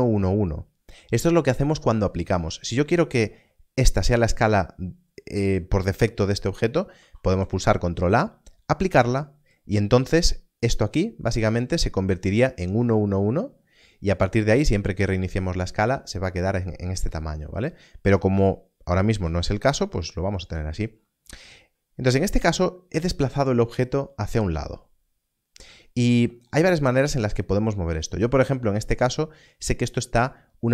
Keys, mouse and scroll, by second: 3.0 n, 3.2 s, 3.9 click, 6.9 ctrl+a, 19.2 alt+s.